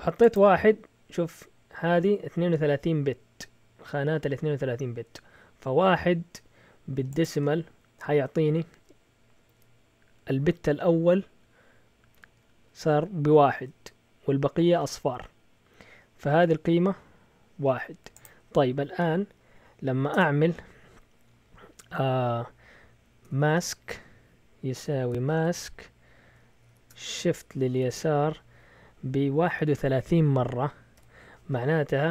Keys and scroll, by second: 20.1 Return, 23.0-31.4 typing.